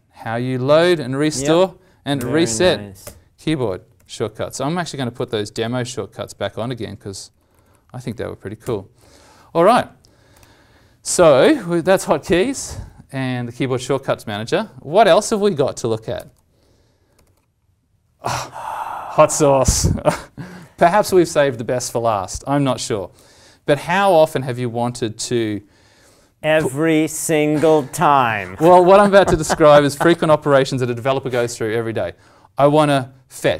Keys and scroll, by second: 5.1 alt+t, 14.9 alt+Tab, 24.4 alt+Tab, 25.4 alt+Tab.